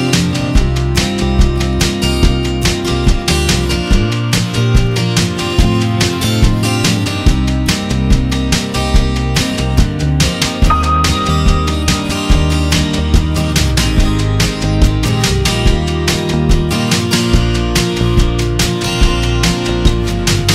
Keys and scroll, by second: 3.0 ctrl+shift+i, 4.6 F7, 10.1 ctrl+j, 11.0 ctrl++, 12.0 b, 14.0 k, 18.5 Return, 19.3 ].